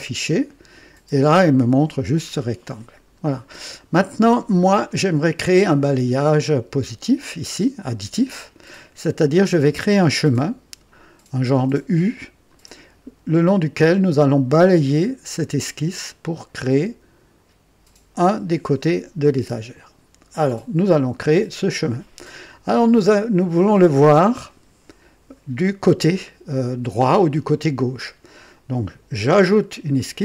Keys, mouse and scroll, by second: 2.1-2.5 scroll down 2, 3.0 scroll down 2, 3.8 scroll down 2, 4.3-5.0 right drag, 29.9 click.